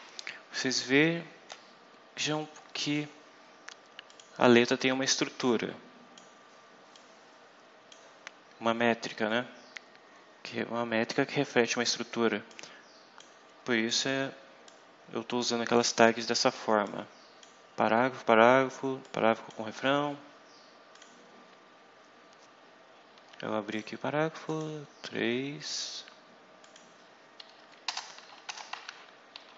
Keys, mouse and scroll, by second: 2.7 click, 4.0 click, 5.0-6.3 drag, 6.9-8.0 drag, 12.4 click, 14.6-15.9 drag, 16.7 click, 18.9 click, 20.9 click, 21.4 scroll down 2, 22.9 scroll down 2, 23.6 click, 24.4 click, 25.6 click, 26.5 click, 27.5 Up, 27.9 Return, 28.4 BackSpace, 28.8 ,.